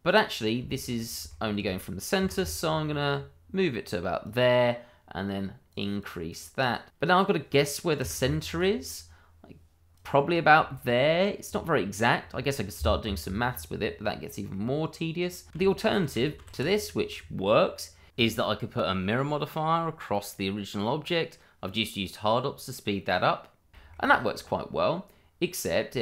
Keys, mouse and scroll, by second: 0.3-0.7 scroll down 1, 0.7 shift+middle click, 1.3 middle click, 1.4 shift+middle click, 2.2 g, 2.3 y, 4.2 click, 6.1 double click, 7.2 middle click, 7.5 scroll up 1, 7.8-8.6 scroll down 1, 8.9 g, 9.0 y, 9.9 click, 10.2-10.6 scroll down 1, 10.6 shift+middle click, 11.4-11.8 scroll up 1, 14.0 middle click, 15.5 scroll down 1, 15.6 shift+middle click, 15.8 ctrl+z, 17.3 middle click, 18.5 shift+click, 19.3 alt+x, 20.3 click, 21.1 middle click, 23.2-23.6 scroll up 1, 23.7 shift+middle click, 24.0 middle click, 25.8-26.0 scroll down 1.